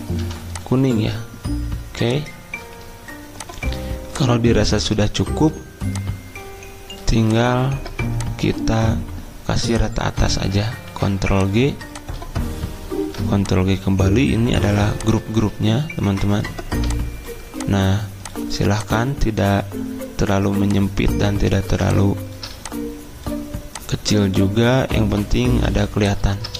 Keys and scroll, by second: 0.2 v, 10.9 ctrl+g, 13.0 ctrl+g.